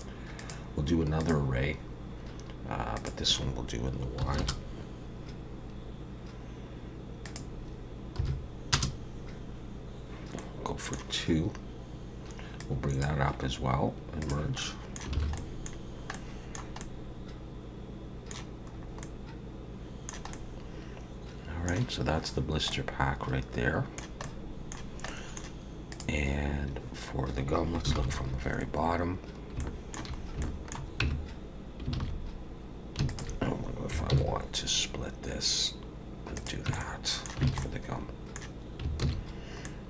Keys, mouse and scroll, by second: 0.4 click, 3.0 click, 7.2 click, 10.4 middle click, 12.6 click, 14.2 click, 14.6 middle click, 15.2 alt+a, 15.4 middle click, 15.8-16.1 scroll down 3, 16.1 middle click, 16.8 middle click, 18.7 scroll up 3, 19.0 middle click, 20.3 middle click, 22.7 middle click, 24.2 middle click, 25.1 middle click, 25.9 click, 28.0 ctrl+KP_7, 29.2-29.6 scroll up 2, 29.6 shift+middle click, 30.2 scroll up 1, 30.4 shift+middle click, 31.0 Tab, 32.0 alt+a, 33.1 alt+shift+click, 34.1 ctrl+b, 36.7 Tab, 36.8 middle click, 37.5 alt+a, 37.6 middle click, 39.0 ctrl+s, 39.6 middle click.